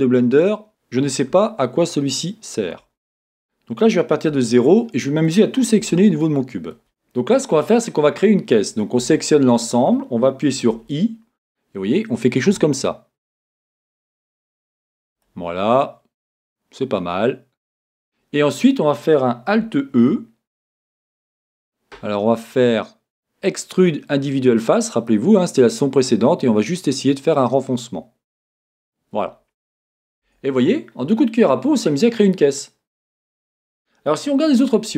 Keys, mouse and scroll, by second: 2.8 z, 4.3 a, 4.6 middle click, 4.7 middle click, 5.3-5.8 scroll up 1, 5.8 a, 6.2 middle click, 9.0 a, 19.9-30.2 alt+drag, 30.2 Tab, 30.6-34.9 middle drag, 34.5-34.9 scroll up 2.